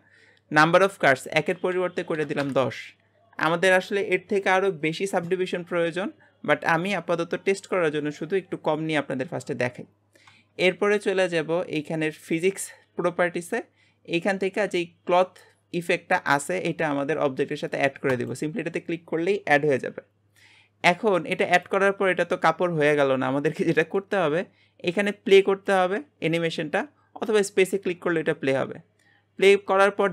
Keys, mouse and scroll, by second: 1.1-4.2 drag, 12.2 click, 18.1-21.1 drag, 21.6-23.8 drag, 23.8-25.6 scroll down 1, 25.6-26.9 drag, 26.9-28.0 scroll down 10.